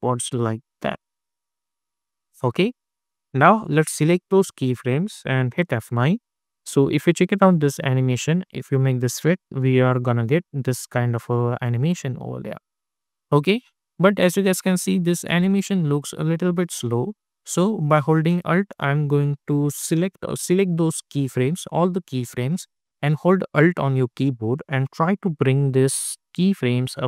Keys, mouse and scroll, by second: 1.5 click, 5.5 F9, 6.3 click, 9.0 space, 12.3 space, 13.8 click, 14.4 space, 17.1 space, 18.4-20.0 alt+drag, 20.0 ctrl+z, 20.3-27.0 drag.